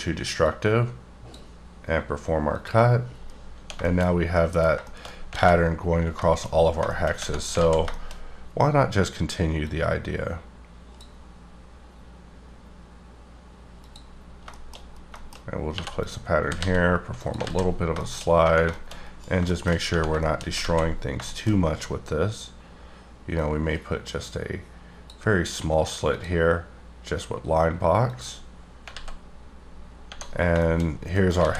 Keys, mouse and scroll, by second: 0.4 click, 3.0-4.1 scroll down 9, 3.8 shift+middle click, 4.3 middle click, 5.3 alt+a, 6.2 shift+middle click, 6.4-7.2 shift+scroll up 7, 6.9 middle click, 7.5 alt+z, 7.9 shift+middle click, 8.1 shift+scroll up 2, 8.7-9.6 scroll up 2, 9.6 click, 13.8 click, 14.5 shift+middle click, 14.8-15.5 scroll up 4, 15.1 shift+middle click, 15.7 2, 16.0 click, 16.4 g, 17.2 click, 17.4 z, 17.7-18.4 scroll down 9, 17.9 middle click, 18.6 shift+middle click, 18.9 shift+scroll down 2, 19.4 shift+middle click, 19.8 scroll up 1, 20.1 shift+middle click, 20.4-23.4 scroll up 10, 20.6 alt+z, 21.3 shift+middle click, 23.4 click, 26.1 click, 28.1 click, 28.9 alt+z, 29.5-30.9 scroll down 15, 30.6 shift+middle click, 31.1 middle click, 31.4 a.